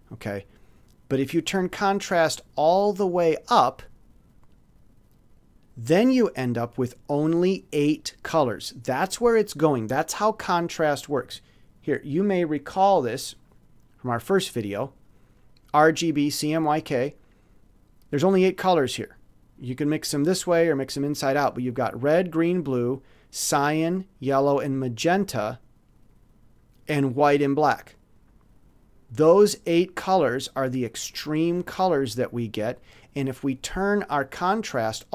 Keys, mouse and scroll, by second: 12.9 click, 13.8-15.0 middle drag, 32.6-34.1 drag.